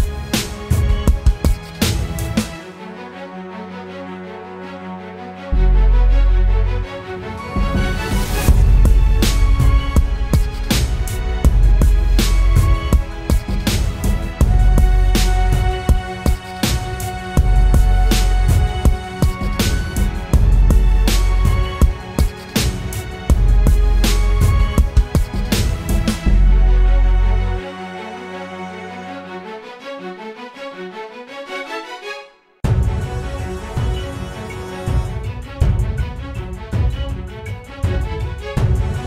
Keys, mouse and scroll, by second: 14.2 ctrl+t, 14.7 alt+shift+click, 17.8 alt+shift+click, 24.8 Return, 30.7-34.2 typing, 34.0 double click, 35.6 double click.